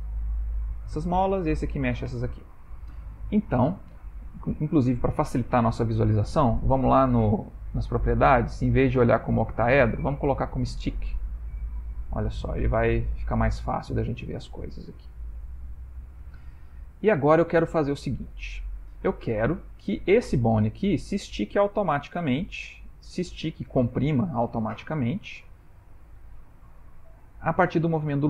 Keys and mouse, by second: 0.6 click, 1.1 r, 2.6 middle click, 3.0 shift+middle click, 3.3 shift+middle click, 3.5 middle click, 6.1 click, 7.4 click, 7.8 click, 9.1 click, 11.1 middle click, 11.9 ctrl+middle click, 12.4 middle click, 14.5 ctrl+middle click, 15.2 shift+middle click, 15.4 ctrl+middle click, 15.9 middle click, 16.6 ctrl+middle click, 17.3 middle click, 20.0 click, 24.6 middle click.